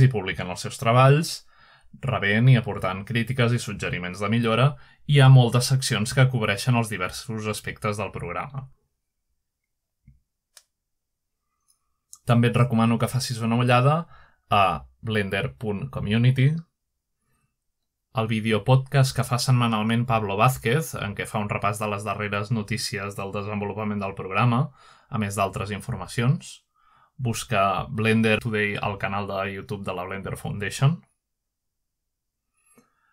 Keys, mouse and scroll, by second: 0.0-2.4 scroll down 3, 2.6-3.2 scroll down 2, 3.2-3.8 scroll up 1, 4.0-6.6 scroll down 2, 6.7 click, 8.4-9.6 scroll down 2, 9.9-10.7 scroll down 2, 10.7 click, 12.0-12.9 scroll down 1, 13.6-14.7 scroll up 2, 14.7 ctrl+scroll up 1, 15.4 ctrl+Tab, 18.4 ctrl+Tab, 22.8-23.2 scroll up 1, 23.2 scroll down 1, 23.3 scroll up 1, 25.8-28.4 drag, 31.5-32.3 drag.